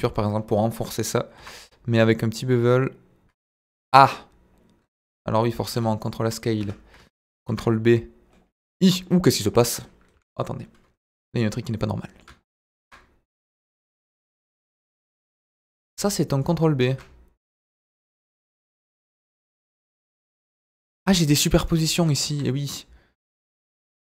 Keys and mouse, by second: 1.3 ctrl+b, 3.6 Escape, 3.9 `, 5.1 Tab, 5.6 ctrl+a, 6.6 Tab, 7.4 ctrl+b, 8.6 Escape, 8.9 middle click, 10.1 KP_Divide, 11.7 middle click, 12.8 ctrl+b, 15.6 Escape, 16.4 click, 17.4 ctrl+b, 18.5 Escape, 19.9 g, 21.0 Escape, 21.3 middle click, 23.2-24.0 middle drag.